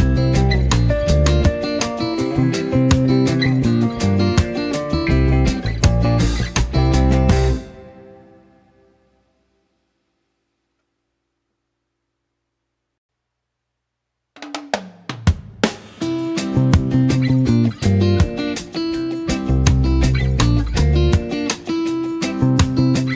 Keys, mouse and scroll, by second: 4.6 click, 11.1 space, 11.3 click, 11.7 z, 11.8 click, 12.1 space, 12.3-12.9 click, 12.9 space, 13.1 click, 14.1 space, 14.9 v, 15.2 click, 15.3 space, 15.6-16.7 drag, 18.1 space, 18.2 click, 19.4 right click, 20.9-23.1 drag.